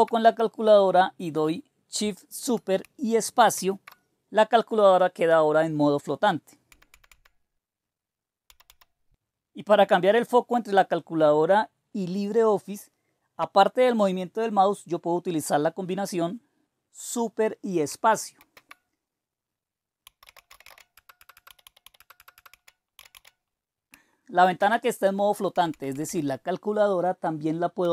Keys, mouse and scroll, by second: 3.6 shift+super+space, 6.7-9.4 typing, 11.0 typing, 18.3 super+space, 19.8-23.6 typing, 21.9 Return, 22.1 Return, 24.4 super+space, 25.2-26.0 typing, 27.5-27.9 typing.